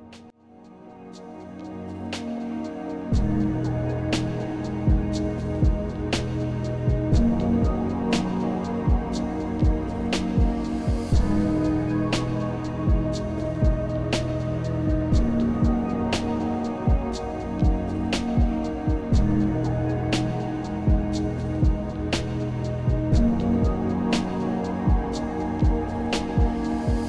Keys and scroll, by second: 4.5 ctrl+alt+z, 22.8 alt+z.